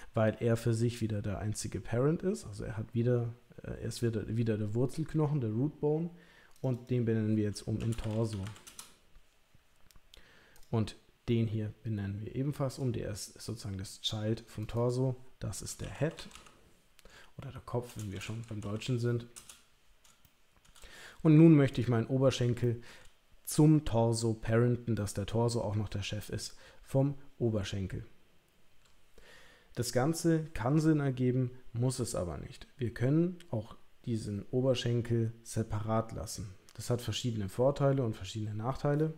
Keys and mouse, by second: 6.5 click, 6.8-9.1 drag, 14.7-19.7 drag, 20.3 shift+middle click, 21.7 click, 22.6 shift+middle click.